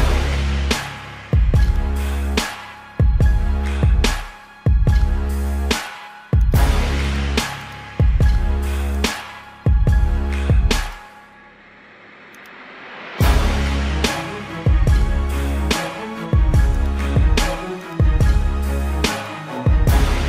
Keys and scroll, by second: 9.6 ctrl+alt+z, 10.9 ctrl+alt+z, 15.2 ctrl+-, 15.7 space, 16.4 ].